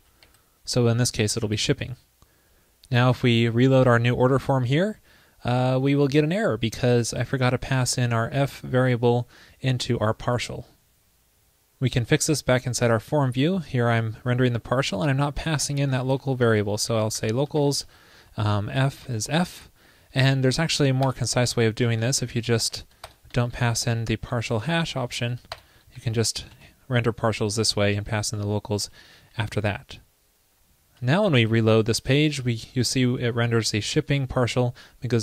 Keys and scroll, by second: 1.4 super+s, 4.7 super+r, 17.6 ctrl+l, 21.8 alt+Left, 22.3 alt+shift+Left, 23.4 super+Left, 23.5 alt+Right, 23.7 alt+Right, 24.4 alt+shift+Right, 24.5 alt+shift+Right, 26.4 super+Right, 26.6 super+s, 31.5 super+r.